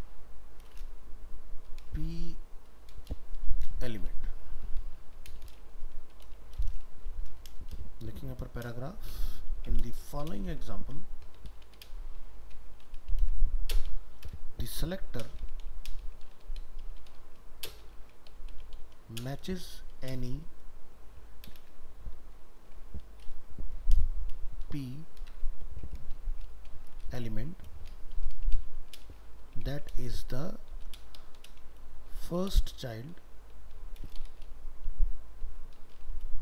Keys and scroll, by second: 24.1 ctrl+v.